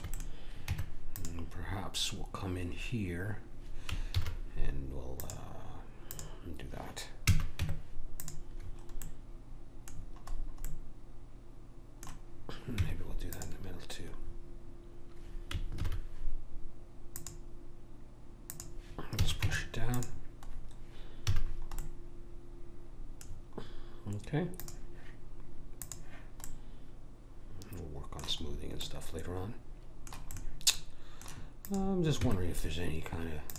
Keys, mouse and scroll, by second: 0.7 Tab, 4.2 ctrl+r, 7.3 a, 7.6 Tab, 8.7 middle click, 12.7 Tab, 15.7 ctrl+r, 19.2 a, 19.5 Tab, 21.2 a, 22.0 middle click, 24.6-27.7 drag, 26.5 middle click, 27.8 middle click, 28.5-28.9 scroll up 1, 28.9-29.9 middle drag, 31.6 click, 32.2 Tab.